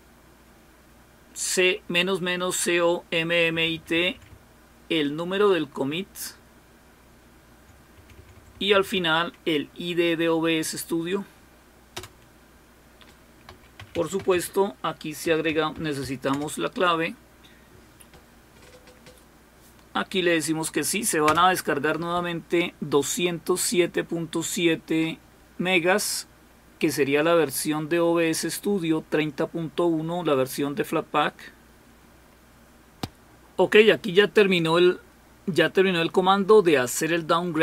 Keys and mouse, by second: 3.9 Right, 4.1 Right, 4.3-7.6 Right, 7.9 Right, 8.0 Right, 8.2 Right, 8.3 Right, 8.5 Right, 8.7 Right, 9.1 Right, 13.9-16.5 typing.